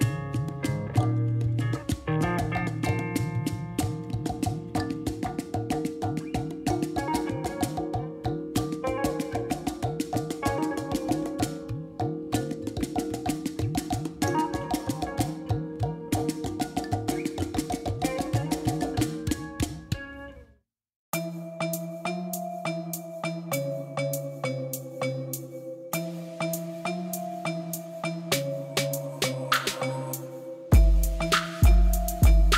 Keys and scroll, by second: 9.1 Tab, 11.0 3, 14.4 shift+s, 16.7 Tab, 17.3 alt+a, 18.2 shift+a, 22.1 Tab, 23.3 s, 24.5 Escape, 25.2 o, 25.8 s, 27.6 s, 27.9 shift+z, 31.4 Tab, 31.7 g, 32.0 z.